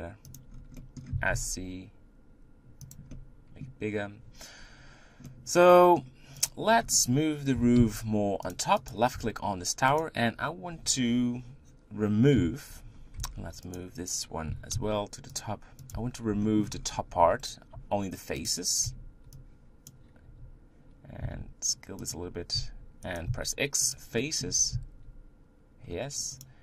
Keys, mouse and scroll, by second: 0.5 scroll down 1, 0.8 middle click, 1.1 s, 3.1-6.5 middle drag, 6.5 click, 6.7-7.6 scroll down 1, 7.6 g, 8.9 click, 9.1 Tab, 10.0 click, 12.4 KP_1, 13.2 Tab, 13.7 click, 14.5 g, 15.9 click, 16.0 Tab, 16.4 shift+middle click, 16.7-17.2 scroll up 3, 17.7 z, 18.5 click, 19.9 b, 21.2 s, 22.6 s, 24.0 x, 24.2 middle click, 24.5 Tab, 25.0 z, 25.8-26.4 scroll down 2, 26.4 click.